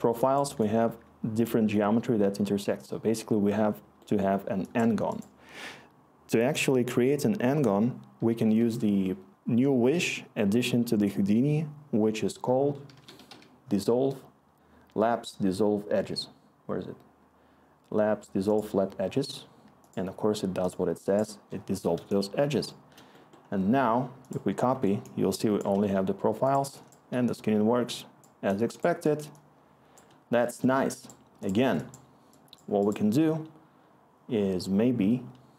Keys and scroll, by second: 0.8-2.0 scroll, 8.5 Tab, 12.6-13.7 typing, 22.5-23.0 scroll.